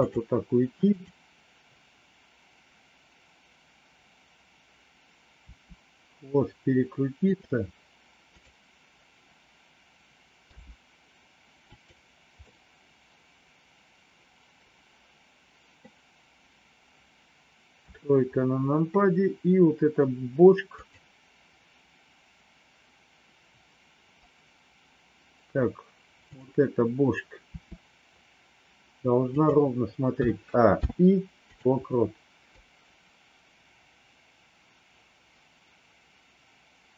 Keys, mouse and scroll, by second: 1.0 click, 5.4 r, 8.3 click, 10.5 g, 12.5-15.8 middle drag, 17.8 KP_3, 20.7 click, 27.5 r, 30.2 a, 30.8 i, 32.5-36.9 drag.